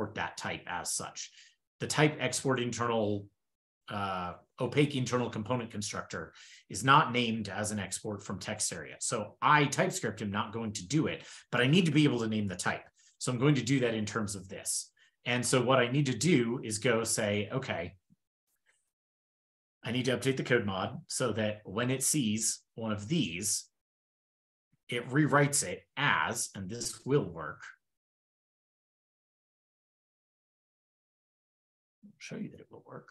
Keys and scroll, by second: 5.0 super+1, 15.0 super+w, 15.6 super+d, 17.3 super+Down, 29.4 shift+super+Right, 30.8 super+c, 32.5 super+v.